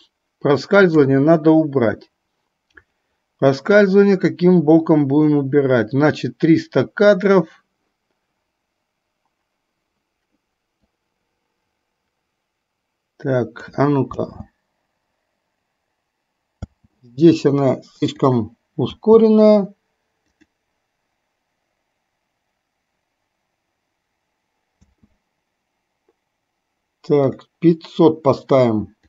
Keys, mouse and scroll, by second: 11.0-13.6 drag, 14.2 space, 16.8 space, 18.3 click, 19.0 space, 20.5 click, 25.0 space, 27.3 click.